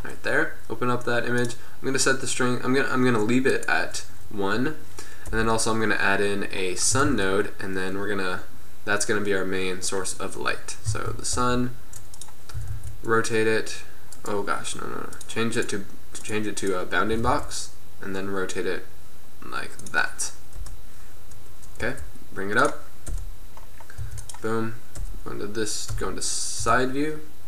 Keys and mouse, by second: 1.5-3.6 drag, 3.6-5.4 middle drag, 5.4 KP_7, 7.1 shift+a, 11.0 z, 11.5 g, 12.7 r, 15.2-16.2 drag, 17.2 r, 18.3-19.5 middle drag, 20.6 KP_1, 21.9 g, 23.2 KP_7, 24.1 r, 25.0 KP_1, 26.7-27.4 typing.